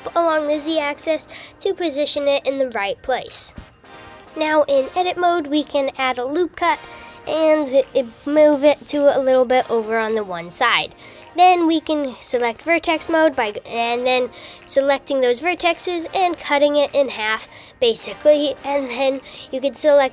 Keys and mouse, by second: 1.2 g, 3.6 super+r, 8.8 shift+z, 10.5 click, 11.3 click, 12.8 x, 18.7-20.1 drag.